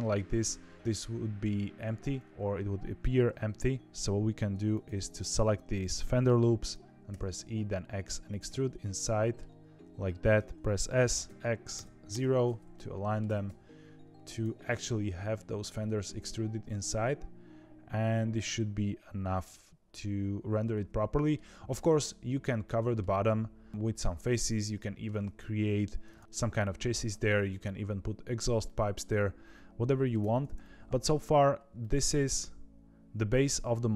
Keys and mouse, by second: 5.9 middle click, 8.5 middle click, 10.5 ctrl+z, 10.5 s, 10.7 s, 12.7 middle click, 13.2 g, 15.3-21.3 middle drag, 22.6 middle click, 24.7 middle click, 26.2 middle click, 28.6-30.1 middle drag, 30.1 Tab, 30.5 middle click, 30.9 ctrl+s, 31.7-33.7 middle drag.